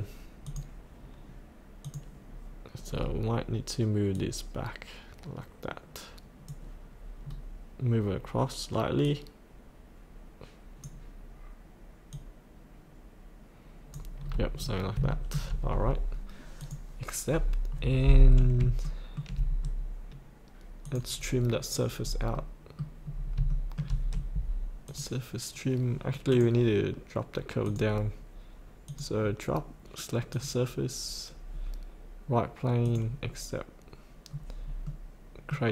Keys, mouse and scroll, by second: 3.0-4.1 scroll down 1, 4.1 click, 7.2 scroll down 1, 9.1-14.2 drag, 14.2 scroll up 1, 15.1 shift+middle click, 15.2-16.4 scroll up 1, 16.6 click, 17.3 scroll up 1, 18.8 shift+middle click, 19.7-20.8 scroll down 1, 20.8 click, 22.0-22.3 scroll up 1, 22.4 middle click, 23.1 scroll down 1, 23.5-24.6 shift+middle drag, 24.8 click, 34.3-34.9 scroll down 1, 34.9 middle click.